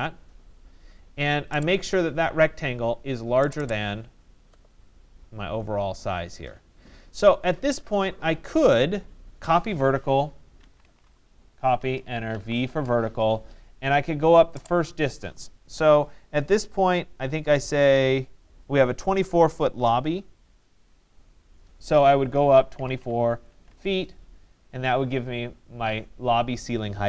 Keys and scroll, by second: 11.3 Return, 22.3 2, 23.0 4, 23.7 Return.